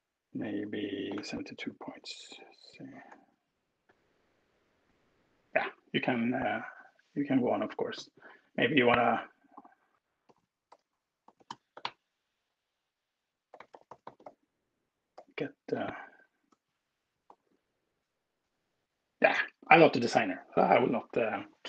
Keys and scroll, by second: 0.7-1.4 typing, 2.9 super+s, 10.2-14.2 typing, 15.3 n, 16.7 super+s.